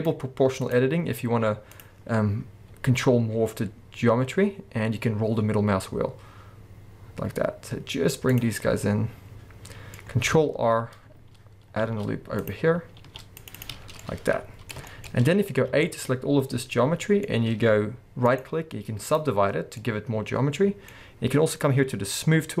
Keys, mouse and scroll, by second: 8.4 click, 8.5 middle click, 10.0-10.4 scroll up 2, 12.4 click, 13.0 ctrl+r, 13.6 click, 13.8 scroll down 1, 14.0 middle click, 15.1-15.5 scroll up 1, 15.5 scroll down 1, 16.0-17.3 middle drag, 17.3-18.3 scroll up 2, 18.3-19.6 right drag, 19.6 scroll down 2, 19.8-22.6 middle drag.